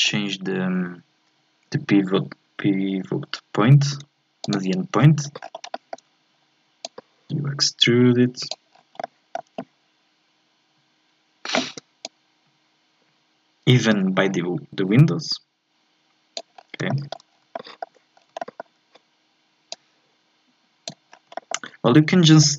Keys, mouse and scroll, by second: 5.4-5.7 scroll down 1, 5.7-6.8 shift+middle drag, 6.8-8.7 drag, 8.7-9.0 scroll down 1, 9.0-12.0 shift+middle drag, 12.0-16.6 drag, 16.6-16.9 scroll up 2, 16.9 shift+middle click, 17.4 scroll up 2, 17.5 shift+middle click, 18.1 scroll down 2, 18.4-19.7 shift+middle drag, 19.7-21.1 drag, 21.1 scroll down 1, 21.3-22.4 shift+middle drag, 22.4-22.5 drag.